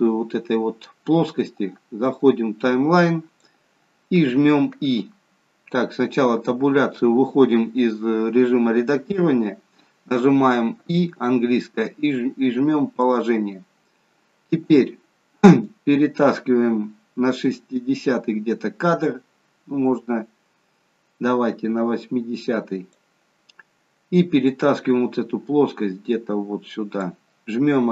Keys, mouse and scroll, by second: 2.3 click, 6.4 Tab, 15.7 click, 24.4 click.